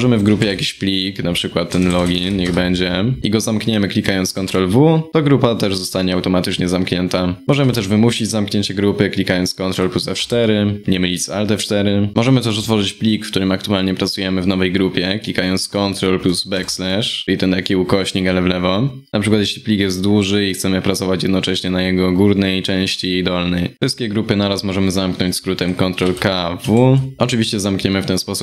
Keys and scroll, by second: 0.0 ctrl+p, 4.0 ctrl+w, 9.8 ctrl+F4, 16.2 ctrl+\, 26.3 ctrl+w.